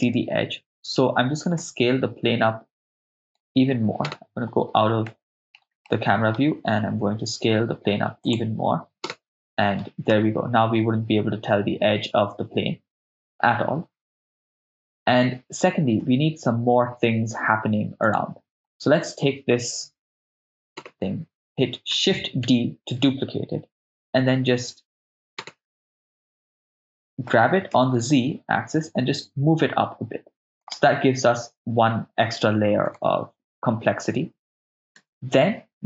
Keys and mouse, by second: 1.6 s, 3.2-4.1 right drag, 4.1 KP_0, 5.1-5.5 ctrl+middle drag, 5.9 middle click, 7.0 s, 8.2 click, 9.1 KP_0, 10.1 shift+space, 14.4 shift+space, 15.2 shift+space, 16.0 shift+space, 18.1 click, 18.1 right click, 20.8 KP_0, 22.5 shift+d, 23.0 Return, 25.4 KP_0, 27.3 g, 27.8 z, 30.7 ctrl+click, 33.0 shift+space, 35.0 shift+space.